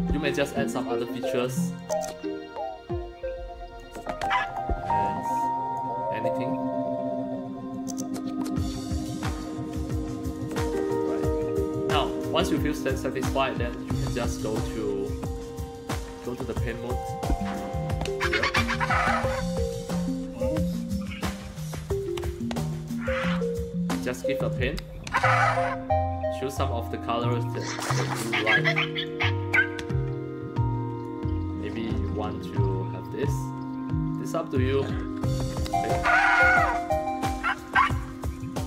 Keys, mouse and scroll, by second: 1.8-3.8 drag, 4.5 click, 5.0 click, 7.7-10.3 drag, 10.8 click, 17.0 click, 20.3-20.6 scroll up 3, 21.2 middle click, 22.1 click, 24.5 click, 27.2 click, 27.5 click, 29.0-31.0 drag, 34.1 click, 35.4 click, 37.3-38.5 drag.